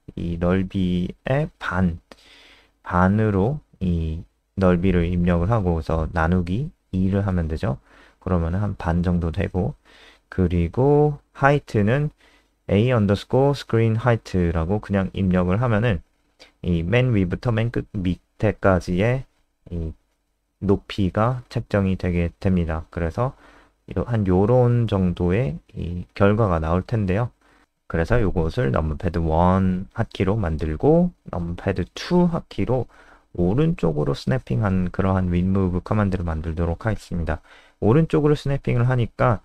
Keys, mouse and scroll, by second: 0.2-2.6 typing, 4.8-5.8 typing, 8.6 click, 9.4 Down, 9.5 End, 9.9-15.1 typing, 22.2 super+n, 23.2 super+Left, 25.3 click, 25.9 super+Down, 26.4 click, 26.7 alt+F4, 26.9 click, 27.4 Down, 27.8 End, 29.5 Down, 30.1 Up, 30.3 Up, 30.5 Home, 30.8 shift+End, 30.9 shift+Down, 31.1 shift+Down, 31.8 ctrl+c, 32.1 ctrl+End, 32.2 Return, 32.4 Return, 32.5 ctrl+v, 32.7 Up, 32.8 Up, 33.1 Right, 33.4 BackSpace, 33.5 BackSpace, 33.8 ctrl+s, 34.0 Escape, 38.0 click.